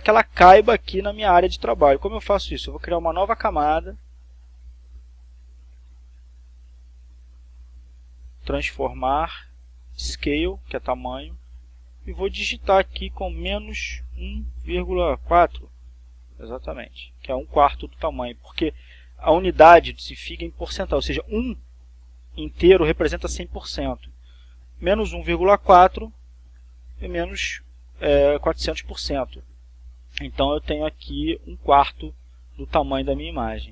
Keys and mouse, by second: 3.7 right click, 10.8 click, 12.3-13.3 drag, 14.0 -, 15.1 ,, 16.0 Return.